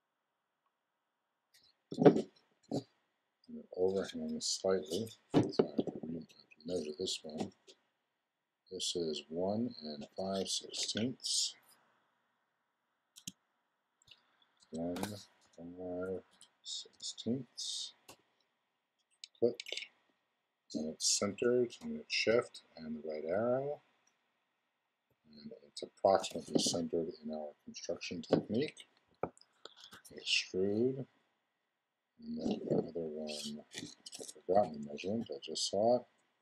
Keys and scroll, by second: 13.2 Tab, 14.6 1, 18.0 Return, 22.2 shift+Right, 25.0 shift+Left, 29.8 super+e.